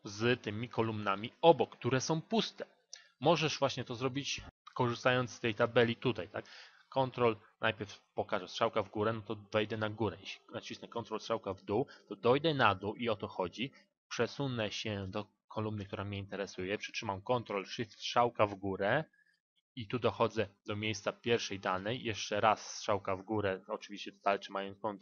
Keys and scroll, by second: 17.7 ctrl+shift+Up.